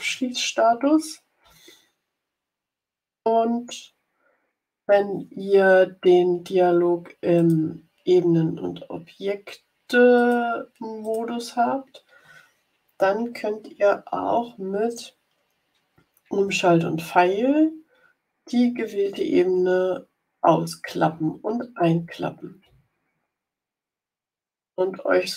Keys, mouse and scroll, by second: 0.6 Left, 1.3 Up, 1.9 Left, 7.3 click, 10.1 click, 10.9 click, 14.1 Down, 17.2 shift+Right, 19.4 shift+Right, 21.0 shift+Left, 21.8 shift+Left, 22.5 shift+Up, 23.2 Up, 23.9 shift+Left, 24.5 shift+Up.